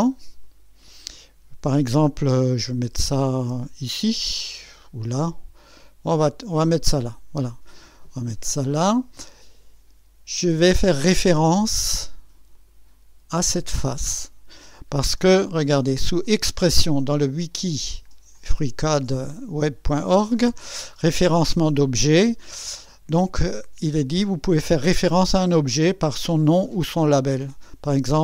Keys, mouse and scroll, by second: 0.4 click, 7.0 click, 12.5 click, 15.9 click.